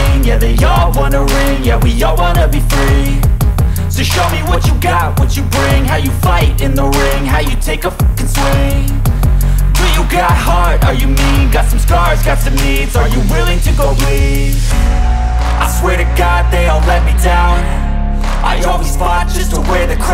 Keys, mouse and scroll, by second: 1.6 ctrl+z, 2.2 click, 5.2 scroll up 1, 6.0-8.1 drag, 7.0 typing, 11.5-11.9 scroll down 1, 14.2 click, 17.2 typing.